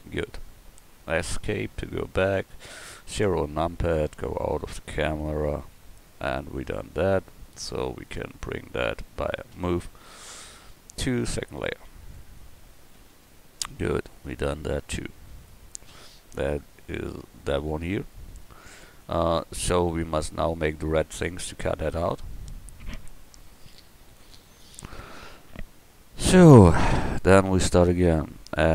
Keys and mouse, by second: 3.2 KP_0, 5.6 a, 8.0 right click, 9.5 m, 13.0 KP_1, 13.4 middle click, 14.1 middle click, 15.2-15.9 middle drag, 19.0-19.4 middle drag.